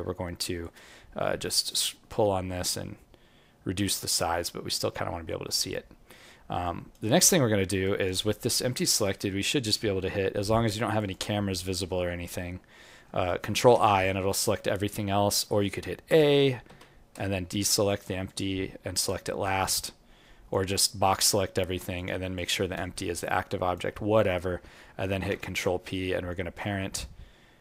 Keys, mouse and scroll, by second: 6.4 scroll up 4, 6.6 alt+click, 7.0 alt+right click, 7.4 alt+middle click, 7.8 alt+right click, 8.5-9.0 scroll down 4, 8.9 scroll up 1, 10.9 click, 13.6 ctrl+i, 17.6 shift+click, 19.6 alt+click, 20.8 click, 21.9 shift+click, 22.9-23.4 scroll up 4, 23.4 alt+click, 25.2 ctrl+p.